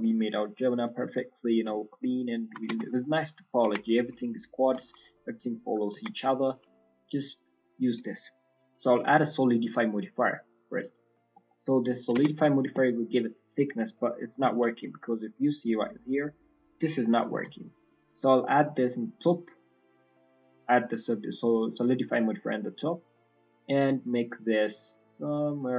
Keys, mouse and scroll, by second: 0.7 click, 1.0 middle click, 2.3 shift+click, 2.6 Tab, 2.8 middle click, 3.3-3.7 scroll down 2, 3.6 Tab, 3.8 middle click, 4.7 Tab, 4.9 middle click, 5.4 shift+middle click, 5.9 Tab, 5.9-6.2 scroll up 2, 6.1 middle click, 7.3 click, 10.7 click, 11.1-11.5 scroll down 4, 11.4 middle click, 11.9 middle click, 12.1 Tab, 12.3 middle click, 12.8-13.8 scroll up 5, 14.5 alt+c, 14.8 middle click, 15.3 scroll up 2, 15.6 middle click, 17.3 alt+c, 18.6 click, 20.1 click, 22.2 click, 22.5 scroll down 2, 22.7 middle click, 24.1 click, 25.3 click.